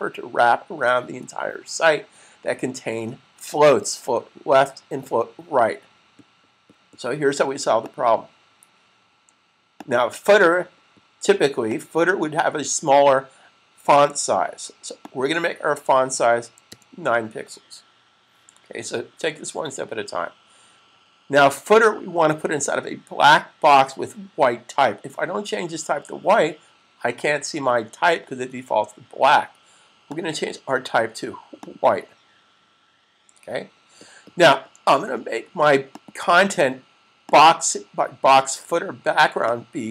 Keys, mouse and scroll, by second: 7.7 click, 14.9 click, 16.5 9, 29.9 click, 35.8 click.